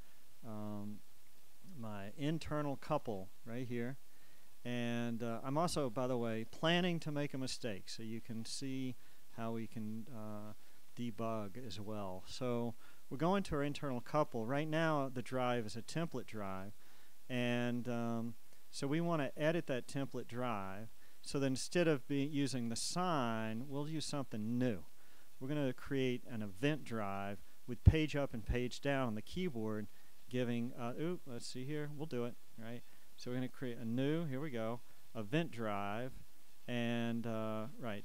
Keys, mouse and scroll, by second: 4.4 click, 6.3 click, 9.0 click, 10.2 click, 13.0 click, 15.5 click, 20.6 click, 23.1 click, 24.4 click, 26.5 click, 30.0 click, 32.5 click, 34.1 click, 36.9 click.